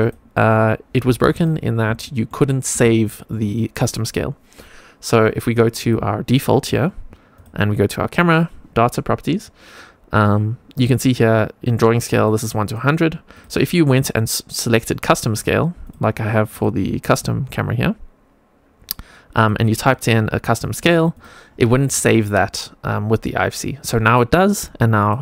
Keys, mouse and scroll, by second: 1.2 click, 1.9 shift+scroll down 1, 2.0 shift+middle click, 2.5 scroll down 1, 2.9 shift+middle click, 5.7 click, 6.6 click, 7.3 click, 12.1 click, 13.3-15.8 drag, 16.4 click, 19.3-20.4 drag, 20.6-21.8 drag, 24.9 click.